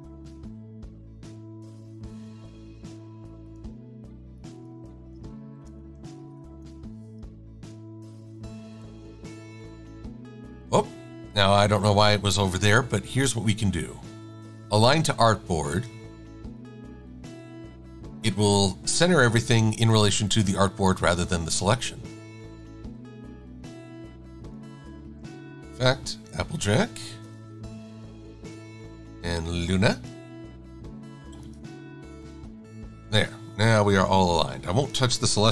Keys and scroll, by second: 5.2-6.9 typing, 9.2 super+f.